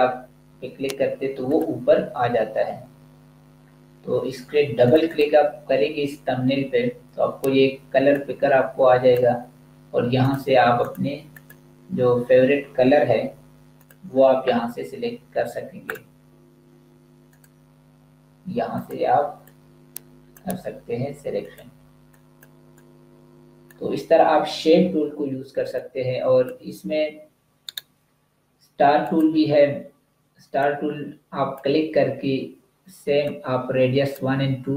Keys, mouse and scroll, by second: 1.3 click, 4.7 click, 7.9 click, 13.7 click, 25.3 space, 25.7 click, 25.9 space, 27.5 right click, 28.9 click.